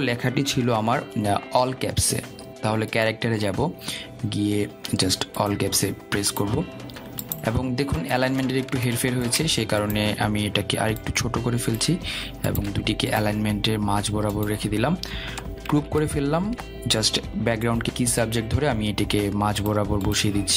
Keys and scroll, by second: 2.0 ctrl+a, 17.1 ctrl+g.